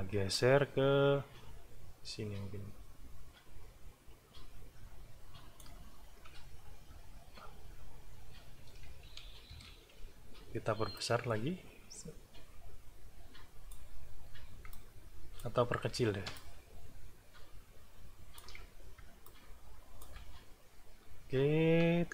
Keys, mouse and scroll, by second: 0.3-5.8 alt+drag, 7.0-7.4 ctrl+scroll up 2, 9.6 shift+s, 10.9-13.9 ctrl+drag, 14.7 alt+click, 16.3-18.6 ctrl+shift+drag, 19.2 alt+click, 20.4-20.9 ctrl+alt+scroll down 1, 21.3 ctrl+scroll up 2.